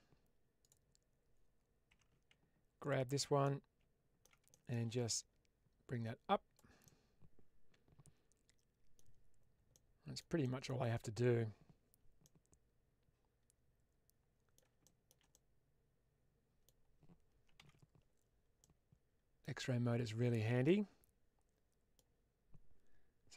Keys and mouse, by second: 1.8 2, 2.7 click, 3.3 middle click, 4.4 shift+middle click, 5.0-6.4 drag, 6.7-8.9 middle drag, 9.6 middle click, 10.3 shift+middle click, 12.1-14.4 middle drag, 14.7 shift+middle click, 15.2-16.5 middle drag, 17.5 alt+z, 18.5 middle click, 19.8 alt+click, 20.5-21.9 middle drag.